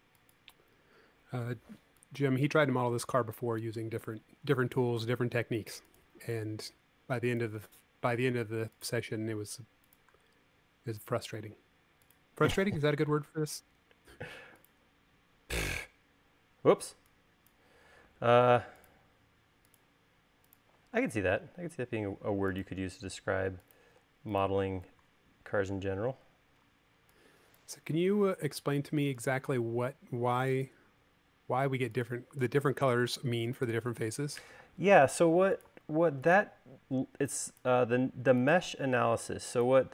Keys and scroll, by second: 0.9 l, 4.5 l, 16.8 e, 18.0 l, 25.8 e.